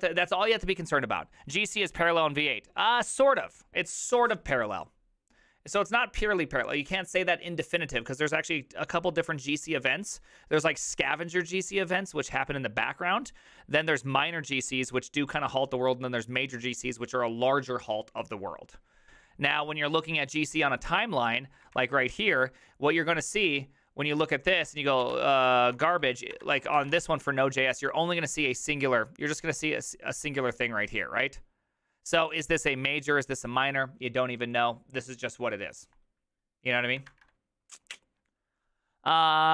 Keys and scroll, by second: 21.7 alt+[, 24.6 ctrl+f, 24.8-27.4 typing.